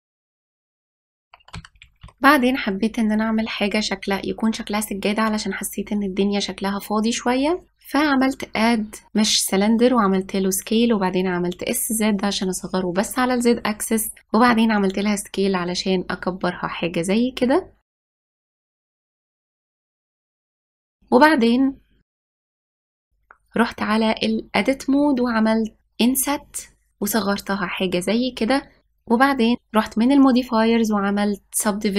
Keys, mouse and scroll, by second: 0.5 g, 4.1 ctrl+s, 7.8 click, 10.0 s, 13.6 s, 16.8 s, 18.6 click, 19.5 g, 21.9-25.1 drag, 28.9 click.